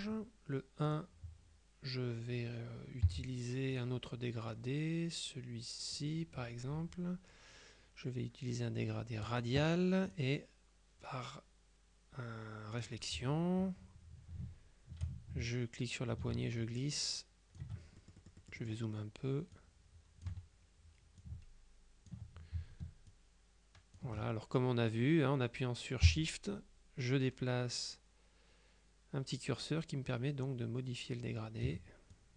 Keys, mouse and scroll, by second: 0.0 click, 1.0 click, 3.1 g, 3.9 click, 6.0 click, 9.3 click, 10.2 click, 12.8 click, 15.6-18.2 ctrl+shift+drag, 18.3 shift+click, 19.6 click, 21.3 ctrl+click, 23.2 shift+click, 26.2-32.2 shift+drag.